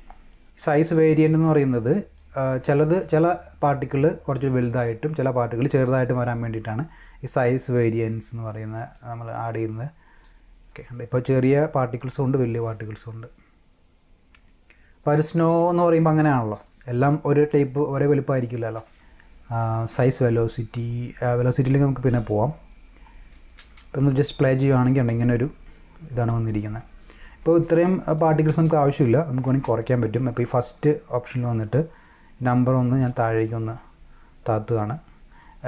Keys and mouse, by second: 1.2 click, 8.9-10.2 drag, 22.4 click, 23.6 space, 27.4 space, 28.2 click, 28.4 space, 29.5 space, 32.5-35.6 drag.